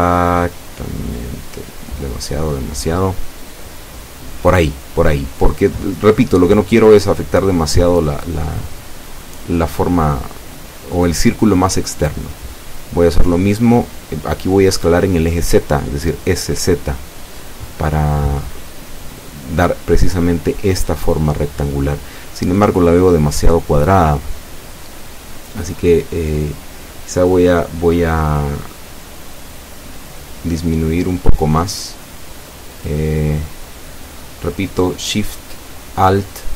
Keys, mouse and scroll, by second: 1.0 shift+o, 2.0 s, 2.2 x, 4.3 middle click, 4.3 scroll down 1, 4.8-5.5 scroll up 4, 7.2 scroll up 2, 9.4 scroll up 2, 10.1 scroll up 2, 11.0 scroll down 2, 17.6 click, 18.8 right click, 20.2 shift+right click, 21.5 s, 22.0 z, 25.1 click, 26.3 Tab, 26.8 scroll down 2, 27.3-30.4 middle drag.